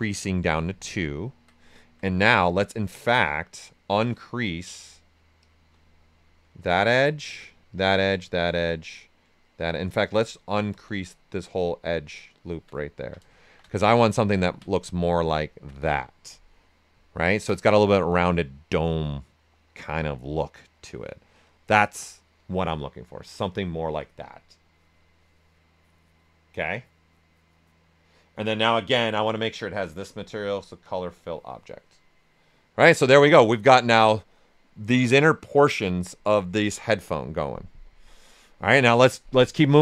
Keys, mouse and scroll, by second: 1.0 ctrl+right click, 2.7 space, 3.6 click, 6.4 alt+click, 6.9 right click, 7.7 alt+click, 8.8 right click, 9.4 alt+click, 9.8 space, 11.4 alt+click, 12.8 ctrl+right click, 13.4 shift+f, 13.8 alt+right click, 15.1 right click, 15.7 typing, 16.2 click, 17.0-21.5 ctrl+right drag, 17.0 typing, 21.5 right click, 29.8-39.7 drag, 38.8-39.8 typing, 39.7 ctrl+right click.